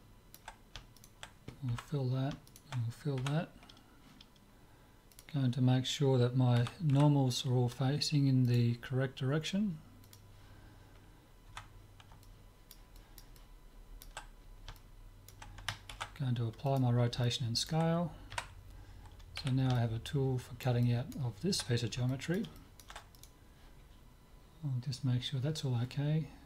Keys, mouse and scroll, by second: 1.0 click, 1.8-4.3 right drag, 1.8 f, 3.2 f, 5.1-6.8 drag, 6.6 a, 7.0 a, 10.1 click, 11.6 Tab, 12.2 middle click, 15.9 ctrl+a, 18.3 KP_Divide, 18.7 middle click, 19.5 z, 19.8-24.9 middle drag, 23.1-24.3 drag.